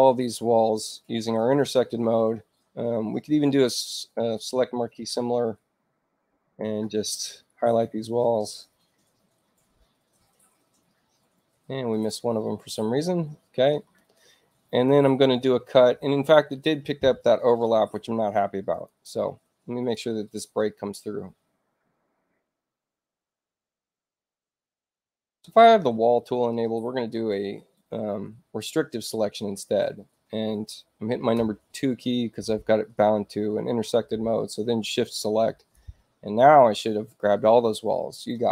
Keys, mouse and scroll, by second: 4.1 h, 6.5 click, 11.8 ctrl+click, 18.6 click, 19.7 click, 22.5 click, 34.4-35.6 shift+drag.